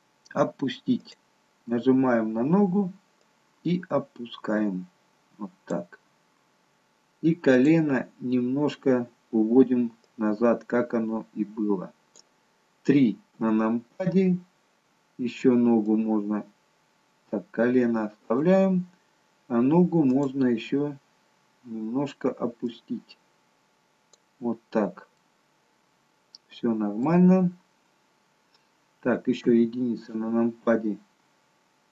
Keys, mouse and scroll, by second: 0.9 click, 3.5 click, 7.5 click, 10.4 click, 13.3 KP_1, 15.7 click, 20.0 click, 22.9 click, 25.2 middle click, 27.3-28.1 scroll down 2, 29.4 KP_1.